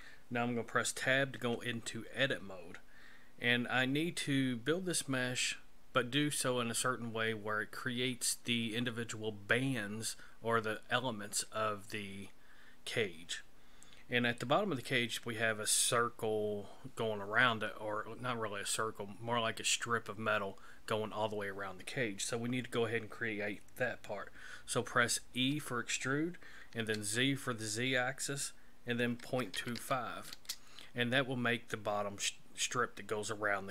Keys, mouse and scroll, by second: 1.4 Tab, 25.3 e.